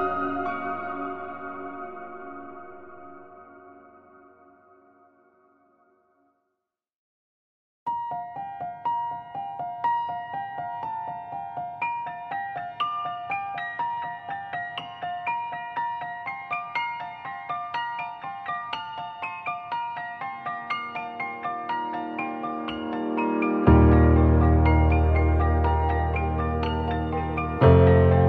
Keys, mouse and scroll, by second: 3.4 scroll down 5, 3.5 scroll up 2, 3.7 scroll down 1, 3.9 scroll down 1, 4.1 scroll down 1, 4.3 scroll down 1, 4.4 scroll up 2, 4.6 click, 4.9 middle click, 5.6 scroll down 1, 5.8 middle click, 6.2 ctrl+space, 6.5 scroll down 3, 6.6 Tab, 7.2 scroll up 3, 7.3 1, 8.0 click, 8.1-8.5 scroll down 1, 8.5 middle click, 8.6 click, 8.7-9.1 scroll up 2, 8.8 shift+middle click, 9.3 middle click, 12.3 click, 12.5 middle click, 14.1 click, 14.5 middle click, 16.5 click, 16.9 middle click, 17.5 click, 17.7 middle click, 17.8 shift+middle click, 17.9 scroll up 1, 18.2 middle click, 18.3 click, 18.6 middle click, 19.6 click, 19.9 middle click, 22.4 click, 22.6 middle click, 22.7 shift+middle click, 22.8-23.2 scroll up 2, 23.3 middle click, 27.1 click, 27.2 scroll down 2, 27.6 middle click, 27.9-28.2 scroll down 2, 28.2 scroll up 2.